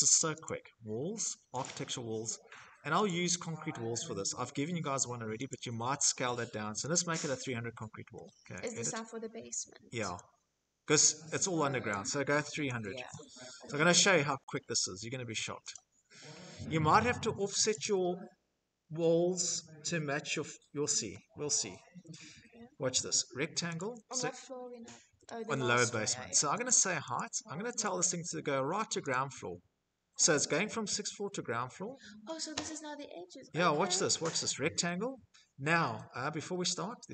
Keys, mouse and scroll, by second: 0.4 click, 1.8 click, 5.7 click, 7.4 click, 9.8 click, 10.7 click, 10.9-11.9 typing, 12.7 Return, 18.7 click, 20.3 scroll, 22.5 click, 25.4 click, 25.9 click, 26.6 click, 27.9 click, 32.3 middle click, 32.3 middle click, 33.2 click, 35.1 Escape.